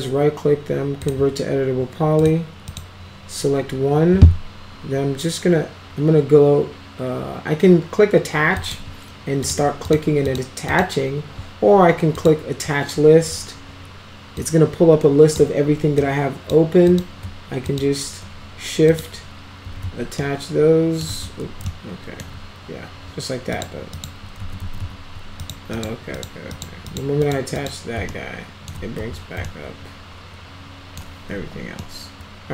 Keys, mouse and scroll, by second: 1.0 click, 2.2 click, 2.7 click, 8.6 click, 9.4 click, 9.9 click, 10.3 click, 10.7 click, 12.1 click, 14.4-15.4 drag, 16.0 click, 16.9 click, 17.7 shift+click, 18.9 click, 20.2-21.0 alt+middle drag, 21.2 ctrl+z, 21.7 alt+middle click, 23.6 click, 23.9 click, 24.4 ctrl+z, 24.7 ctrl+z, 24.8 ctrl+z, 25.4 click, 25.8 click, 26.2 click, 26.6 click, 26.9 click, 27.3 click, 27.6 click, 28.1-28.7 alt+middle drag, 29.5-31.0 alt+middle drag, 31.4 alt+q, 31.8-32.5 alt+middle drag.